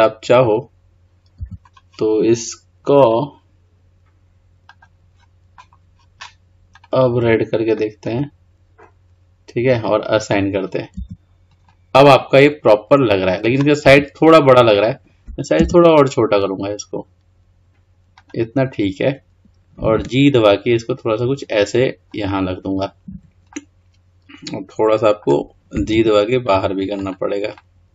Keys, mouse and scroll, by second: 1.5 Tab, 3.1-6.1 drag, 6.9 click, 10.3 click, 11.1 Tab, 11.7 scroll down 1, 11.9-14.0 middle drag, 14.0 Tab, 15.7 s, 23.7-26.1 middle drag, 26.1 g, 27.7-27.9 middle drag.